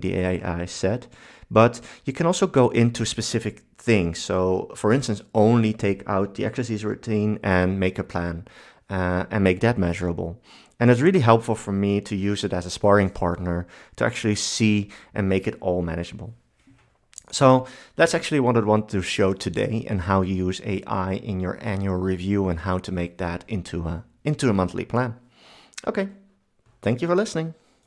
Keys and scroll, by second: 17.5 super+1.